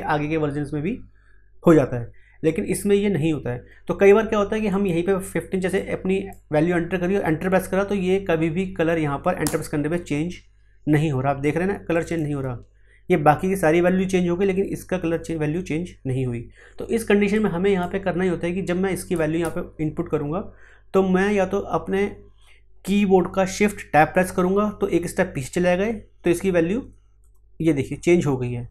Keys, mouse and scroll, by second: 4.7-9.4 drag, 9.4 Return, 11.9 click, 17.3-27.2 drag, 27.2 shift+Tab.